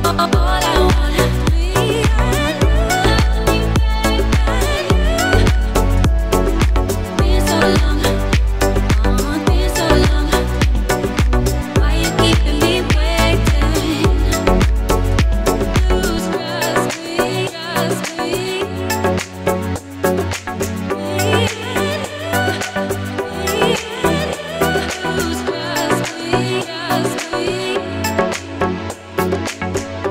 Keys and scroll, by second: 2.4 s, 5.2 ctrl+r, 8.8 s, 11.4 ctrl+r, 14.7 s, 18.0 ctrl+r, 19.9 Escape, 22.6 s, 26.6 e, 27.9 z.